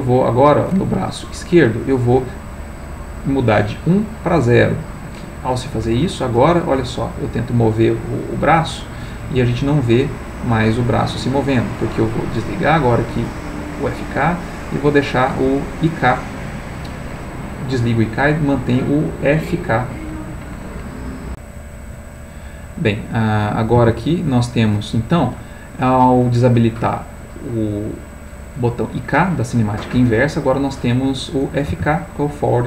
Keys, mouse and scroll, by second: 0.2 click, 0.9 Escape, 3.7-5.2 drag, 6.6 g, 10.8 Escape, 12.4 click, 13.8 click, 21.3 click, 23.1 click, 23.8 r, 25.2 Escape, 31.7 r.